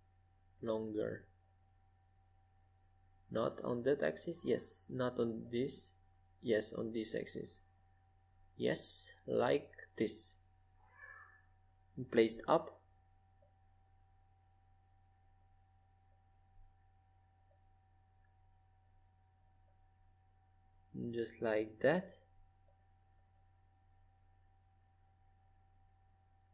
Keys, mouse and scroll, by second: 3.1 5, 11.6-12.9 middle drag, 12.9 click, 13.1 middle click, 13.3-14.7 drag, 14.7-16.0 middle drag, 16.0 KP_5, 17.2 KP_5, 17.9 KP_3, 20.6-22.4 drag, 23.4-24.9 middle drag, 24.9 z, 25.8 z, 26.3 z.